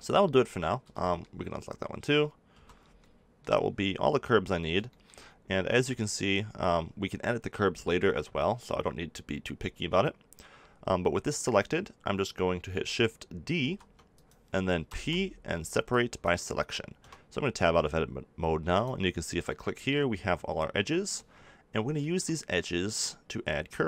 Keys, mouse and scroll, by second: 0.8 b, 2.5 b, 6.6-13.5 middle drag, 13.5 shift+d, 14.8 p, 16.1-18.2 drag, 16.9 Tab, 18.7-20.6 drag, 19.8 g, 21.6 middle click.